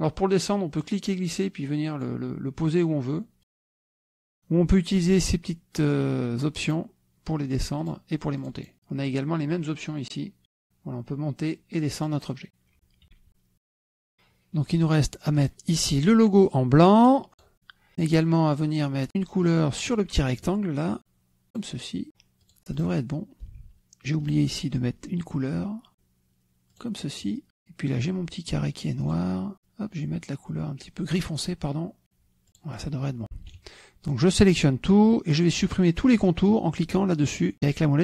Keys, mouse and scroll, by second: 1.7-3.1 drag, 3.4-4.4 drag, 7.5 click, 8.7 click, 9.2 click, 12.3 click, 12.7 click, 13.7 KP_Subtract, 14.1 click, 14.5 middle click, 15.4 middle click, 16.2 click, 17.5 click, 18.7 click, 20.8 click, 23.3 click, 24.1 click, 25.2 click, 26.3 click, 27.8 click, 29.1 click, 30.2 click, 31.9 click, 33.3-33.9 drag, 34.3 KP_Subtract, 35.5-36.4 drag.